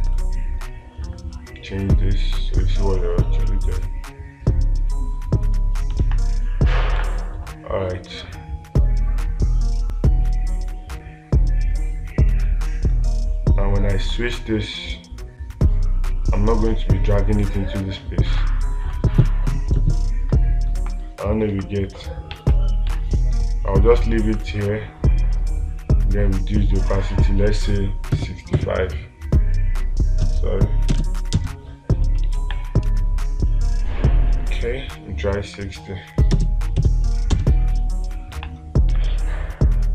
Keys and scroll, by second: 6.5 space, 18.8 space, 22.0 space, 22.8 ctrl+z, 23.3 space, 32.8 space, 39.4 space.